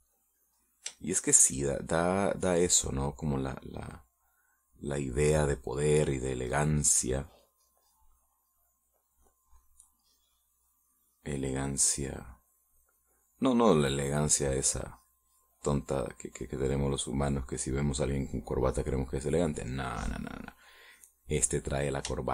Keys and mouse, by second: 2.0 shift+middle click, 3.0-4.1 drag, 4.3 middle click, 5.3 middle click, 6.9-7.9 drag, 9.9 middle click, 11.2-14.9 drag, 15.1 click, 16.7-18.4 drag, 19.4-22.3 drag.